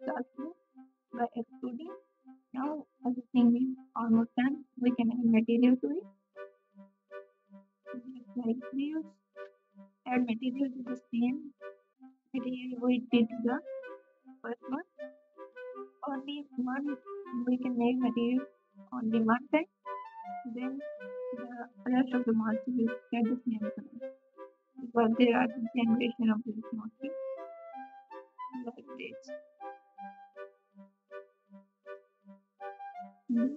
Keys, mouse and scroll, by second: 2.1 Tab, 10.1 2, 12.3 g.